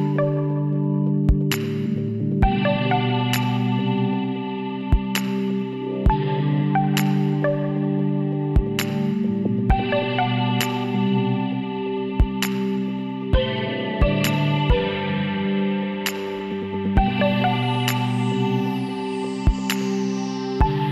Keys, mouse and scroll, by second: 0.2 Tab, 1.3 ctrl+r, 2.9 ctrl+z, 3.7 ctrl+r, 7.5 ctrl+z, 8.5 Tab, 10.6 Tab, 11.7 Tab, 12.6 Tab, 14.0 x, 15.0 Tab, 19.6-20.9 middle drag.